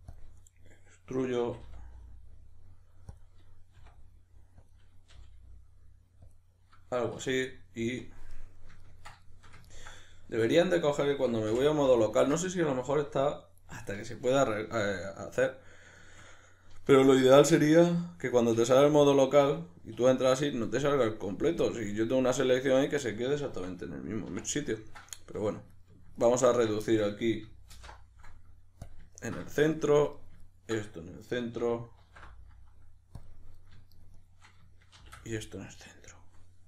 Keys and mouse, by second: 0.1 click, 0.7-3.2 middle drag, 1.4 s, 3.2 click, 3.8 r, 4.8 click, 5.1 g, 6.4 click, 7.2 \, 8.0 KP_Decimal, 8.3-10.8 middle drag, 10.4 2, 10.8 right click, 11.5 f, 12.1-25.7 ctrl+middle drag, 18.6 \, 21.8 KP_Decimal, 24.3 1, 25.7 right click, 26.2 ctrl+right click, 26.8-30.1 shift+middle drag, 27.7 alt+m, 30.1 right click, 30.4 ctrl+right click, 32.0 alt+m, 33.5 right click, 33.9 shift+right click, 34.1 shift+right click, 34.9 shift+r, 35.6-36.6 middle drag.